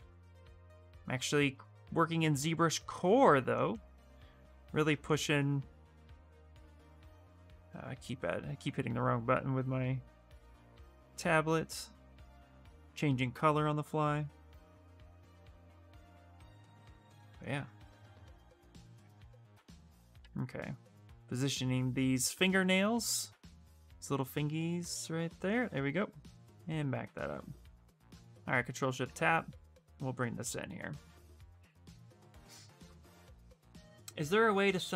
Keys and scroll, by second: 20.0 f, 20.7 f.